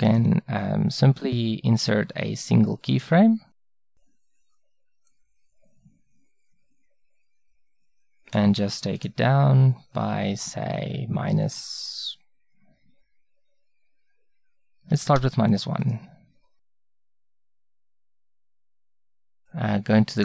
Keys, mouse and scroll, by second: 0.1-2.5 drag, 5.2-7.8 drag, 7.8-9.0 middle drag, 9.0-13.1 drag.